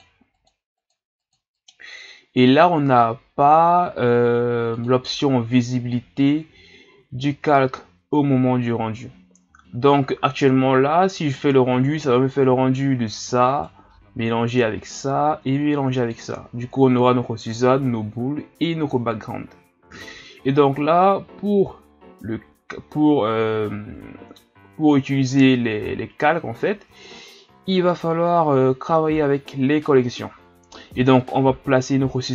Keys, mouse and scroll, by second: 0.3 click, 0.8 click, 1.6 click, 4.7 click, 13.4 right click, 15.0-16.1 right drag.